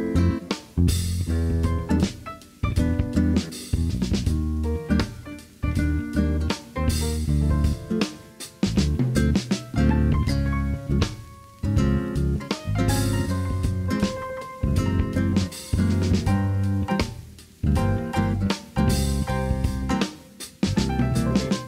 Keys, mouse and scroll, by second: 0.0-1.8 middle drag, 1.9-2.6 middle drag, 3.1 KP_3, 5.5 s, 6.2 click, 7.5 ctrl+z, 7.9 Tab, 8.7 Tab, 9.2 shift+click, 10.1 s, 10.9 shift+drag, 11.4 click, 12.6 Tab, 13.3 middle click, 13.9 middle click, 15.0 middle click, 16.0 click, 16.7 shift+click, 17.4 shift+click, 18.1 s, 18.4 x, 19.3 click, 20.1-21.6 middle drag.